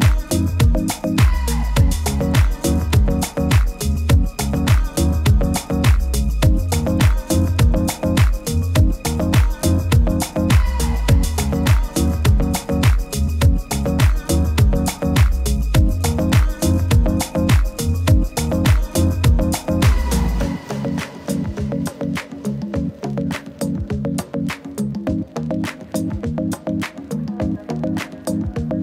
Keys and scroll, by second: 28.0 super+-, 28.2 super+-, 28.3 super+-.